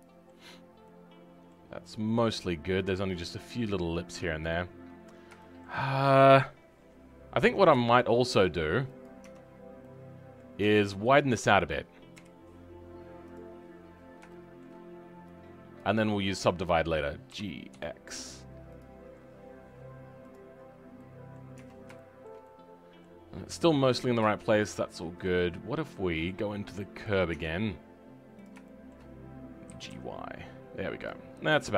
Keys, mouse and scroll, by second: 0.5 scroll down 4, 0.8 middle click, 1.7-2.3 scroll up 3, 2.3-6.6 middle drag, 6.6 scroll down 2, 7.4 Tab, 7.8-9.0 shift+middle drag, 9.0 click, 9.2 Tab, 9.5-9.8 scroll up 2, 9.8-12.1 middle drag, 12.1 KP_1, 13.2 click, 13.5-14.3 scroll up 10, 14.3 shift+middle click, 14.7-15.7 scroll down 2, 15.7 click, 18.9-20.2 scroll down 2, 20.2 click, 20.5-20.9 scroll down 3, 20.9 middle click, 21.5 Tab, 21.9-23.2 shift+middle drag, 23.2-23.6 scroll up 2, 23.6-27.0 middle drag, 27.0 click, 27.5 scroll up 2, 28.4 click, 28.6-29.6 shift+middle drag, 29.6 g, 31.2-31.7 scroll down 6.